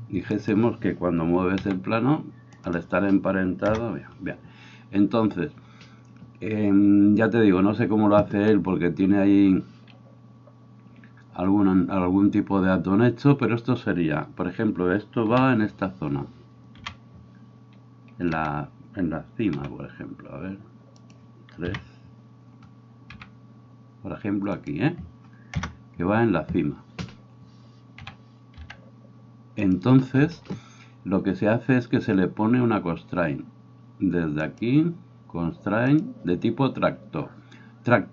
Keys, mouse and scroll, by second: 0.3 right click, 1.6 g, 3.7 KP_0, 15.3 KP_7, 16.8 KP_1, 18.3 f, 19.6 g, 21.1-34.4 middle drag, 21.6 KP_3, 23.1 g, 25.6 KP_0, 28.0 g, 34.4 click, 34.6-35.9 middle drag, 35.9-38.1 drag.